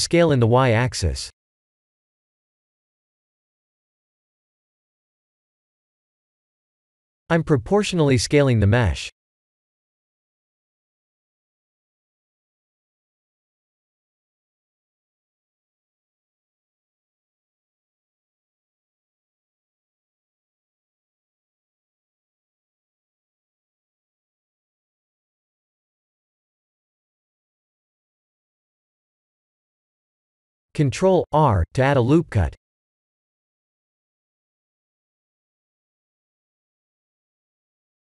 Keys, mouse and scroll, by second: 1.4 KP_1, 1.8 KP_7, 2.8 Tab, 3.2 3, 3.5 click, 6.2 click, 6.8 s, 13.3 click, 15.6 2, 16.1 alt+click, 16.8 s, 22.4 alt+click, 23.7 s, 26.5 Tab, 26.9 middle click, 28.7 middle click, 29.0 middle click, 30.3 ctrl+r, 31.3 Tab, 32.8 middle click, 33.7 middle click, 34.0 middle click, 34.6 KP_1, 34.9 KP_7, 36.1 s.